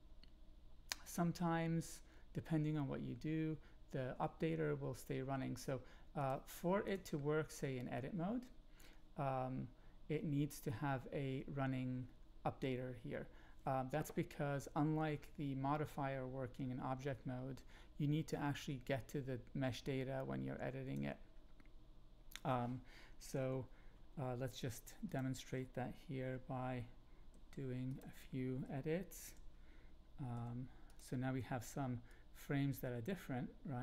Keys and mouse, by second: 6.2-6.9 drag, 18.3-20.9 drag, 23.3 Up, 24.5 g, 25.0 click, 26.2 Up, 27.3 g, 27.9 click, 29.1 Up, 30.3 g, 30.9 click, 32.0-33.8 drag.